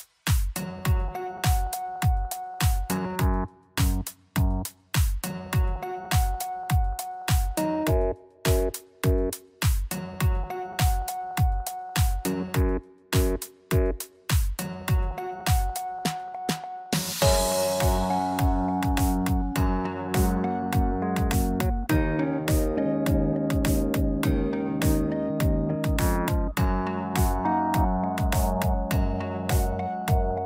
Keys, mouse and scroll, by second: 0.1 s, 3.8 middle click, 4.4 scroll down 2, 4.7 middle click, 6.7 s, 8.9 middle click, 9.3-9.8 scroll up 2, 9.5 Tab, 10.2 ctrl+a, 11.0 middle click, 11.6 Tab, 12.7 click, 14.3 shift+click, 14.4 shift+click, 17.4 click, 17.8 middle click, 23.5 ctrl+b, 29.2 middle click.